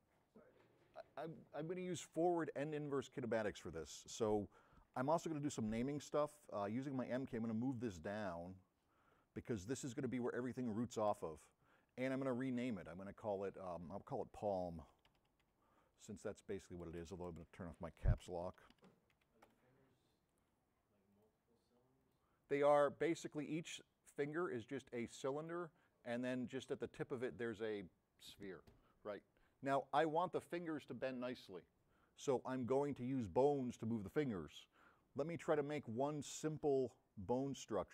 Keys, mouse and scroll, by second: 5.8 m, 6.8-8.0 drag, 8.4-10.0 drag, 8.4-9.7 middle drag, 9.7 m, 17.1 BackSpace, 18.7-19.8 typing.